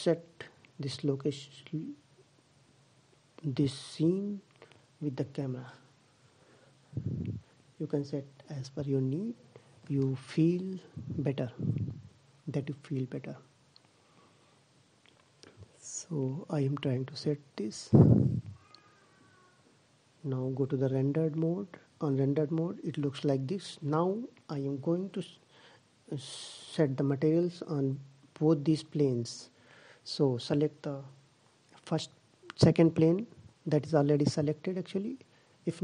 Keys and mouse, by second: 1.6 click, 2.8 click, 4.0-5.9 middle drag, 6.6-8.3 middle drag, 10.1-11.7 middle drag, 11.8 middle click, 15.4-17.2 middle drag, 19.0-20.7 drag, 28.1-30.5 middle drag.